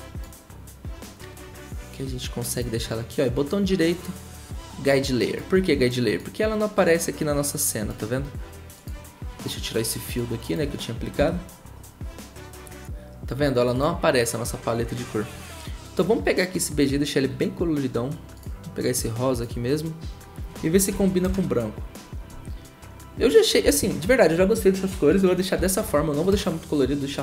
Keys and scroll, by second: 11.2 Delete, 20.9-21.3 typing, 23.6 0.